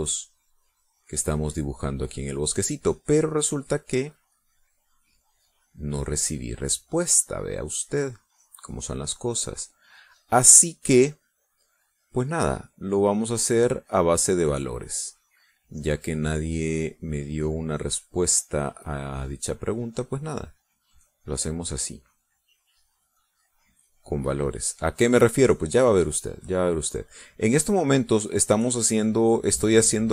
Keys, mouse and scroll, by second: 0.4 click, 1.4 click, 1.9 click, 2.7 click, 3.2 click, 3.6 click, 4.2 click, 5.1 click, 5.6 click, 6.1 click, 6.9 click, 7.5 click, 8.1 click, 8.8 click, 9.3 click, 9.8 click, 10.2 click, 10.9 click, 11.4 click, 11.8 click, 12.3 click, 13.0 click, 13.6 click, 14.1 click, 14.8 click, 15.3 click, 15.6 click, 16.1 click, 16.6 click, 17.0 click, 17.4 click, 18.0 click, 18.6 click, 19.0 click, 19.6 click, 20.1 click, 20.4 click, 20.9 click, 21.3 click, 21.7 click, 22.2 click, 22.8 click, 23.2 click, 23.7 click, 24.3 click, 24.9 click, 25.3 click, 25.7 click, 26.4 click, 27.0 click, 28.1 click, 28.8 click, 29.6 click.